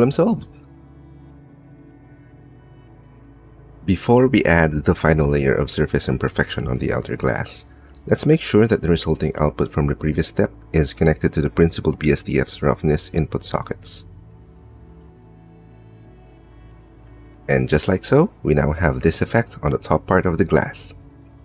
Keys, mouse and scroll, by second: 0.7 click, 0.7 right click, 1.2 middle click, 1.8 click, 1.8 right click, 2.0 click, 2.0 right click, 2.1 middle click, 10.4 click, 12.3 click, 13.6 click.